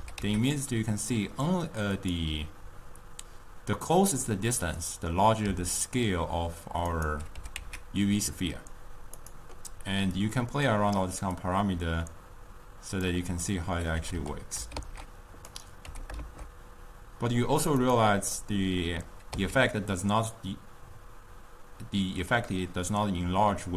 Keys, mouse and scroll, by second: 0.2 g, 5.7 s, 7.9 g, 10.2-13.5 drag, 13.5-14.7 middle drag, 14.7 g, 16.2 g, 18.4-19.6 middle drag, 19.6 s.